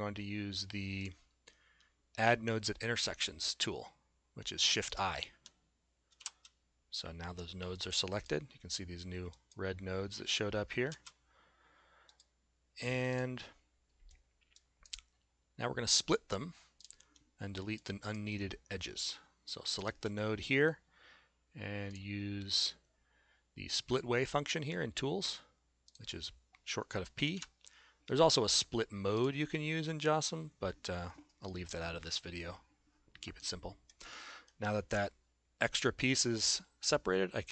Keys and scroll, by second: 7.2 shift+i, 11.0 shift+z, 27.4 p.